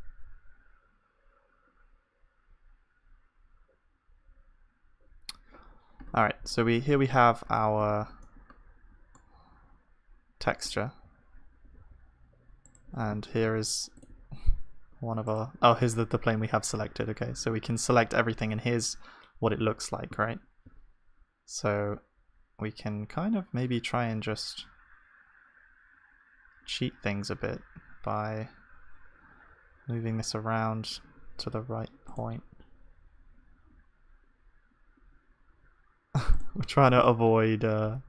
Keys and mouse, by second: 7.8 Tab, 7.8-10.8 middle drag, 11.2 a, 11.8 s, 13.4 g, 14.1 s, 16.8 a, 18.6-20.2 middle drag, 20.2 a, 20.6 s.